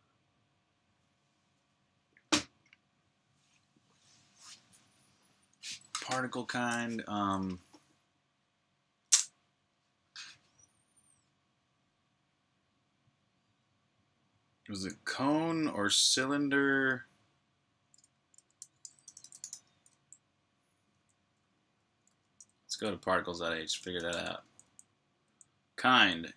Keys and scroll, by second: 17.9-19.3 typing, 20.8 Tab, 21.0 Tab, 21.2 Tab, 21.3 Tab, 21.4 Tab, 21.6 Tab, 21.9 Tab, 22.1 Return, 23.4-25.7 typing.